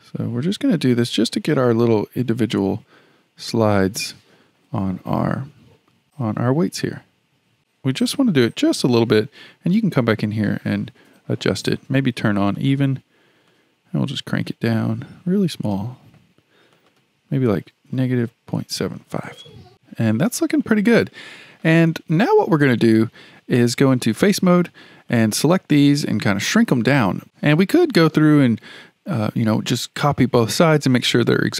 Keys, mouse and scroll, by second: 9.7-12.7 drag, 13.5-16.5 drag, 16.7-20.6 drag, 20.6-23.8 shift+middle drag, 24.0 3, 25.1 click.